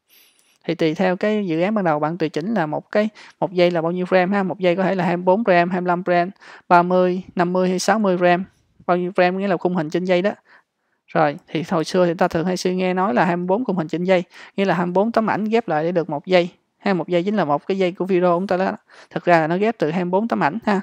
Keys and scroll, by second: 1.1 super+=, 11.4 super+-.